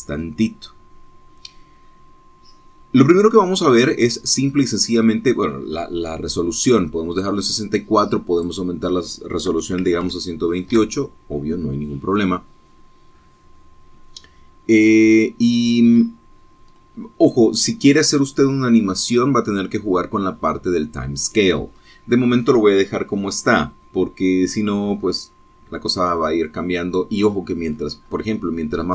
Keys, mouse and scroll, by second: 9.5 click, 10.8 KP_1, 10.9 KP_2, 11.2 KP_8, 11.8 KP_Enter, 16.1 scroll down 2, 16.8 scroll down 2, 17.8 scroll up 2, 26.4-27.0 scroll down 2, 27.7-28.1 scroll down 2, 28.4-28.9 scroll up 2.